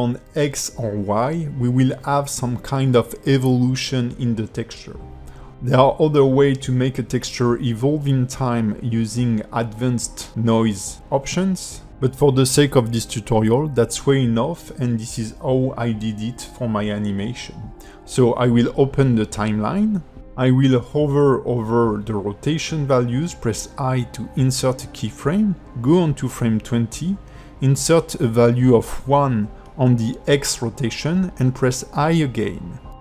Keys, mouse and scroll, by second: 4.3 click, 8.4 click, 11.9 click, 14.7 click, 16.3 click, 18.9 shift+middle click, 24.5 click, 26.8 click, 29.5 click, 31.3 i.